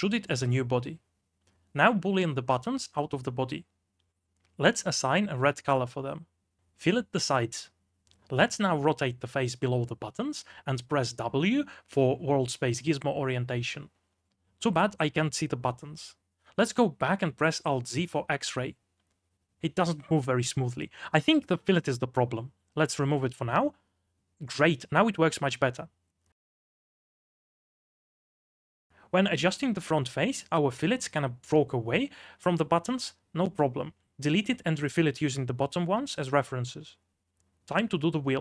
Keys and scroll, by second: 0.2 b, 2.0-4.0 typing, 6.0 m, 7.3 2, 7.7 d, 9.5-12.2 typing, 16.1-19.2 typing, 16.6 ctrl+z, 21.2-26.4 typing, 21.4 ctrl+z, 28.7 3, 29.7 r, 31.2 g.